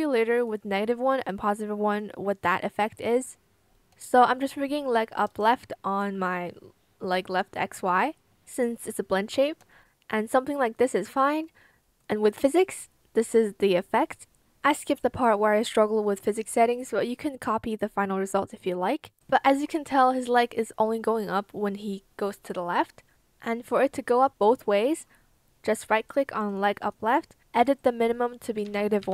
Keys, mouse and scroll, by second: 4.0 shift+click, 5.0 shift+click, 5.3 ctrl+shift+z, 5.4 shift+click, 9.6 shift+click, 11.0 shift+click, 28.5 -, 28.9 KP_1.